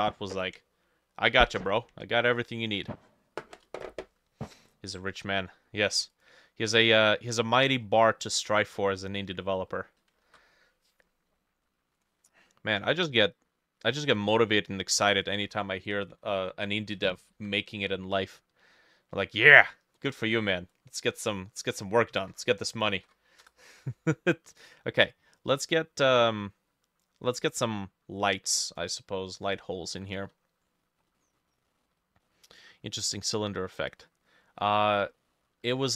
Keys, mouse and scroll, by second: 7.1 scroll down 2, 7.3 middle click, 7.5-8.1 scroll up 6, 8.1 middle click, 8.6 middle click, 9.3 middle click, 10.3 ctrl+s, 16.4 ctrl+s, 16.4 click, 16.4 middle click, 17.4 ctrl+n, 21.9-23.5 typing, 23.0-25.5 drag, 23.5 Return, 31.2 middle click, 31.7 middle click, 32.3 middle click, 33.4-33.7 scroll up 1, 33.7 middle click, 34.3 middle click, 34.9 scroll down 1, 35.2 middle click, 35.8 ctrl+middle click.